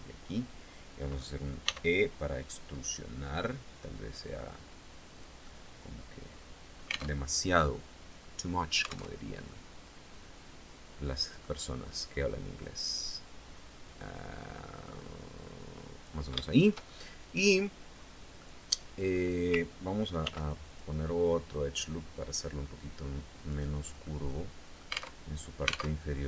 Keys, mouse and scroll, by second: 1.2 e, 4.7 click, 4.9 scroll up 2, 5.0 middle click, 5.1-6.7 drag, 6.7 alt+Tab, 8.7 alt+Tab, 9.0-11.1 alt+middle drag, 12.2-15.8 drag, 15.9 shift+middle click, 16.6 shift+scroll up 2, 17.5-17.9 scroll up 2, 17.9 middle click, 19.8 ctrl+r, 20.2 ctrl+click, 22.9 click, 23.6-24.7 middle drag, 24.7 alt+Tab, 25.5 alt+Tab.